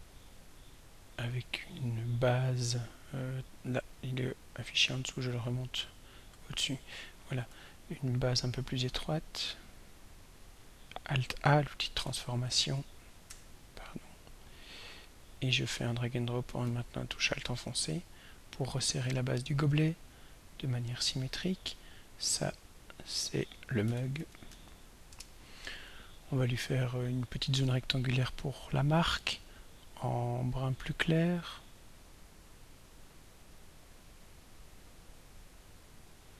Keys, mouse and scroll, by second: 4.4 click, 5.5 click, 7.9 ctrl+scroll up 2, 9.8-10.6 drag, 12.1 a, 13.3 Escape, 15.3-19.8 drag, 22.5 click, 24.0 ctrl+a, 24.2 ctrl+m, 24.5 ctrl+u, 24.7 ctrl+g, 28.6 click, 30.4 click, 33.7-36.3 drag.